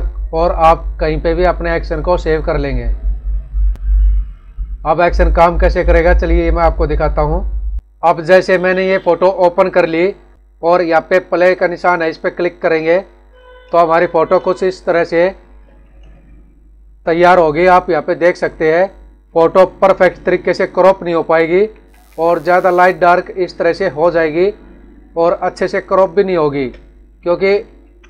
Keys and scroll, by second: 21.2 ctrl+=, 22.5 space, 27.1 ctrl+-.